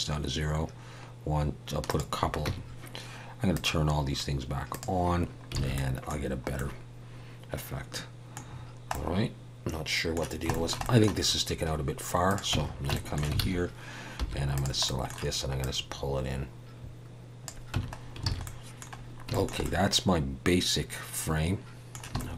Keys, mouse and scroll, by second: 2.4 Tab, 3.5 click, 4.7 click, 5.2-5.5 scroll down 2, 5.6 alt+a, 5.7 middle click, 6.2-7.7 scroll down 3, 6.5 middle click, 8.5 scroll down 2, 8.9 middle click, 10.5 shift+middle click, 10.8 middle click, 12.3 click, 12.5 Tab, 12.9 shift+middle click, 13.4 alt+a, 14.2 3, 14.5 click, 14.8 middle click, 15.6 click, 17.7 Tab, 18.0 scroll down 2, 18.3 alt+a, 18.4 middle click, 18.9-19.3 scroll down 2, 19.3 shift+middle click, 19.6 middle click, 22.2 shift+middle click.